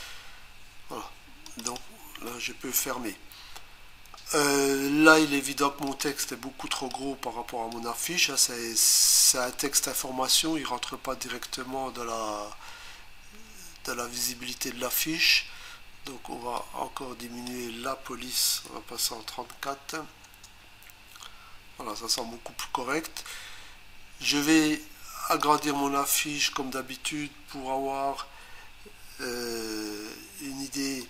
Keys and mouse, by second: 1.5 click, 1.7 click, 5.9 click, 6.1 click, 6.7 click, 7.7 click, 16.6 click, 18.7-19.0 typing, 20.2 Return, 25.4 click.